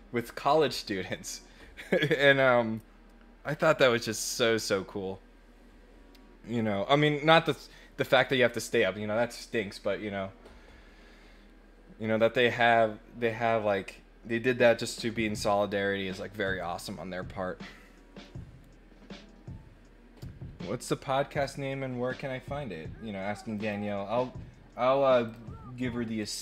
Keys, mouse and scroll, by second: 23.5 click, 25.2 click, 26.1 click.